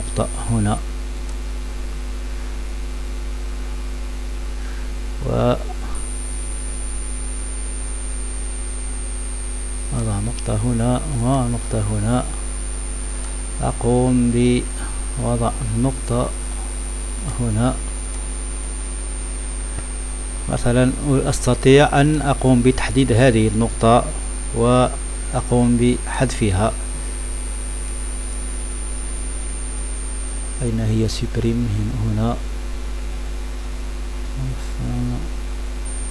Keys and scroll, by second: 26.9 Left, 27.1 Return, 27.3 End, 27.4 Page_Down, 27.5 Pause, 28.6 Print, 28.7 Insert, 28.8 Return, 29.1 BackSpace, 30.6 Insert, 30.8 Print, 31.1 Insert, 31.2 Scroll_Lock, 33.4 Page_Up, 33.8 Home, 34.2 End, 34.4 Insert, 34.8 Print, 35.4 Delete, 35.4 Return, 35.9-36.1 typing.